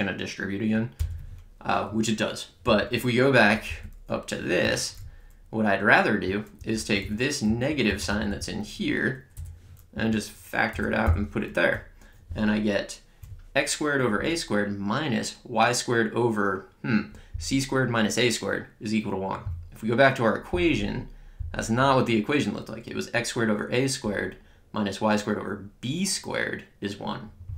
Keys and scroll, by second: 1.0 Return, 2.6 Up, 4.6 Return, 5.0 Left, 6.5 Right, 7.4 Down, 7.8 Left, 9.3 BackSpace, 9.9 Left, 10.7 BackSpace, 11.0 -, 11.7 Right.